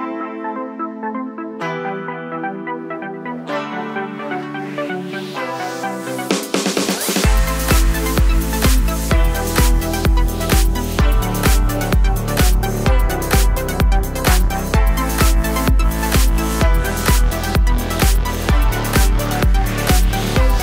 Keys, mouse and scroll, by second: 0.1 click, 0.3 scroll up 1, 0.4 scroll down 1, 0.6 middle click, 0.8 click, 1.0 Tab, 1.3 click, 1.7 i, 2.1 2, 2.3 click, 2.4 middle click, 2.5 scroll down 2, 2.7 g, 3.6 click, 4.0 e, 5.9 click, 6.0-9.3 middle drag, 9.3-10.4 drag, 11.1-12.4 middle drag, 11.9-12.4 scroll down 2, 12.4 click, 12.7 click, 12.9 click, 14.0-20.1 middle drag, 16.0 scroll down 1, 16.1-16.5 scroll up 1, 16.5-16.9 scroll down 1, 16.9 ctrl+z, 18.6-20.4 typing, 18.7 click, 19.4 click, 20.2 click.